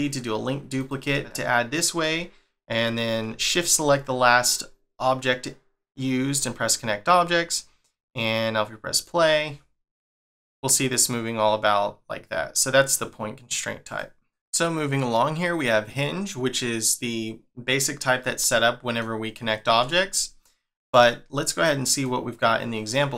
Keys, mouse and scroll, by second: 1.0 middle click, 3.4 shift+click, 6.6 click, 8.9 click, 10.1 middle click, 13.8 click, 18.5 middle click, 22.0 click.